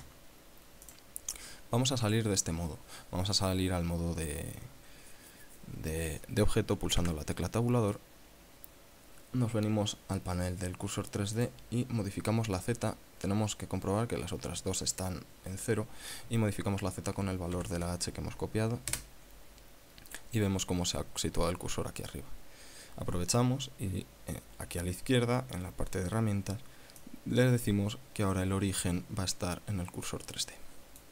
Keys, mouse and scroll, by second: 0.2 ctrl+c, 1.5 click, 7.5 Tab, 11.9 click, 18.1 ctrl+v, 19.5 KP_Enter, 20.5 scroll down 2, 27.5-31.1 drag.